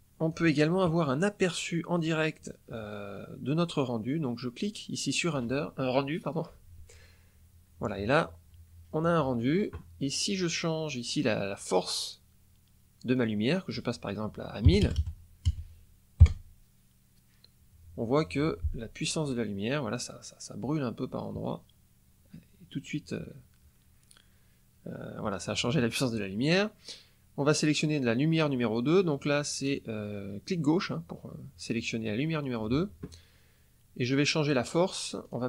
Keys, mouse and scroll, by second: 1.9 click, 4.5 click, 13.1 click, 14.6 KP_1, 15.2 KP_0, 16.2 Return, 28.7 click, 35.1 click.